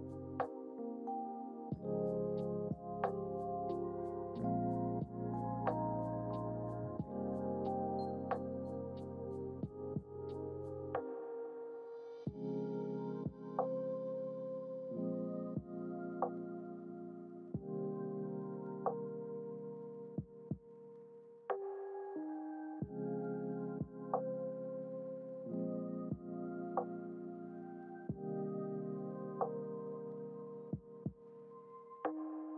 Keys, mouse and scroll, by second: 4.2-5.9 drag, 6.5-11.1 drag, 12.0 click, 13.7 g, 19.7-20.7 drag, 20.7 g.